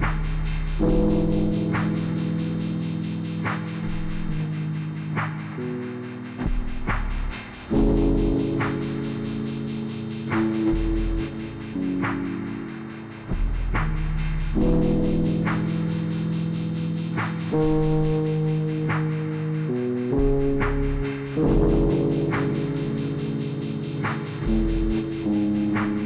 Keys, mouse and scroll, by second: 0.3 click, 1.3 click, 2.5-3.6 typing, 2.9 click, 3.6 click, 4.4 click, 5.0 click, 7.3-12.9 drag, 13.2 r, 13.3 click, 14.0 click, 16.9-18.8 drag, 18.8-20.0 typing, 19.3 click, 20.0-21.3 drag, 22.4-22.9 typing, 22.9 click, 24.2 typing.